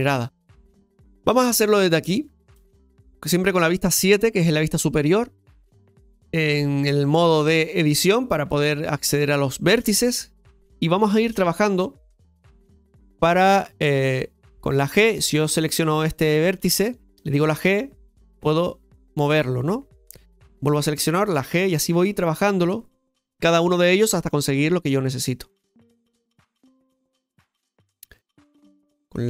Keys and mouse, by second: 5.2 middle click, 7.1 click, 9.9 shift+middle click, 11.0 click, 14.4 g, 15.5-19.1 drag, 19.1 g, 20.5-21.8 drag, 21.8 g, 24.3 click, 26.8-28.0 middle drag.